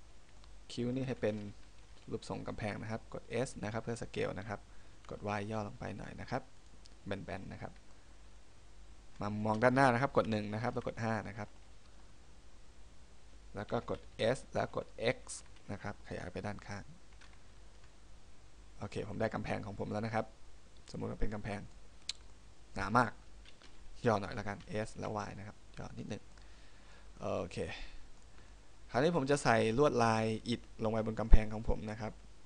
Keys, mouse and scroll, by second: 2.2 middle click, 3.5 s, 6.8 click, 8.1 middle click, 10.2 KP_1, 10.9 KP_5, 11.7-12.5 scroll up 4, 14.3 s, 19.1 click, 19.4 middle click, 21.9 scroll up 1, 22.2 scroll down 2, 22.5 middle click, 24.7 s, 26.2 click, 26.5 middle click, 27.3 middle click, 28.7 middle click.